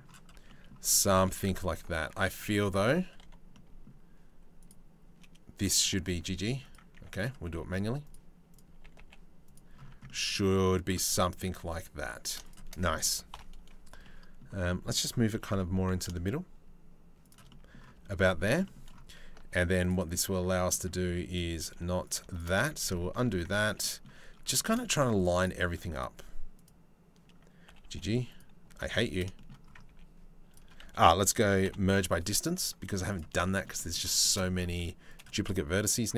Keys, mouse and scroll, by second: 1.6 ctrl+r, 2.3 1, 2.8 2, 3.1-4.2 middle drag, 4.2 click, 5.4 g, 6.6 1, 6.8 click, 7.1 g, 8.1 click, 8.4 g, 9.5 Tab, 10.6 Tab, 10.8 click, 11.1 3, 11.3 click, 12.1 shift+click, 12.9 ctrl+l, 13.6 middle click, 14.9 g, 17.1 middle click, 17.6 Tab, 17.8 middle click, 18.1 Tab, 18.3 middle click, 19.1 ctrl+r, 20.3 click, 20.7 z, 21.3 1, 21.9 shift+click, 22.3 ctrl+z, 22.5 ctrl+z, 22.7 ctrl+z, 23.2 ctrl+z, 25.6 click, 26.2-27.3 drag, 27.3 g, 28.5 ctrl+z, 29.0 shift+middle click, 29.5 1, 30.1 click, 30.4 a, 31.3 m, 33.0 shift+middle click, 33.4 middle click, 33.8 shift+middle click, 34.4 2, 34.7 middle click, 35.4 click, 35.9 g.